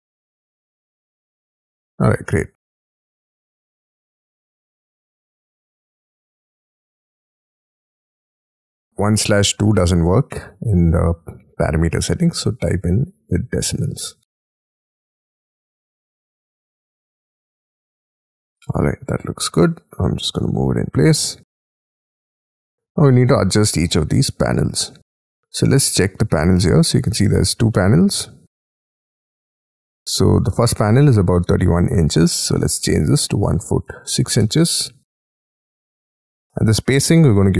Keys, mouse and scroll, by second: 1.5 middle click, 2.7 double click, 2.9 middle click, 3.6 double click, 3.9 Escape, 4.4-6.3 typing, 4.6 middle click, 7.5 double click, 7.6 double click, 8.9 shift+', 19.7-20.0 scroll up 3, 20.0 scroll down 4, 20.5 typing, 22.6 shift+click, 23.0 middle click, 23.3 scroll down 6, 23.8 shift+middle click, 24.2 space, 33.1-34.4 typing, 35.4 Tab, 35.9 Tab.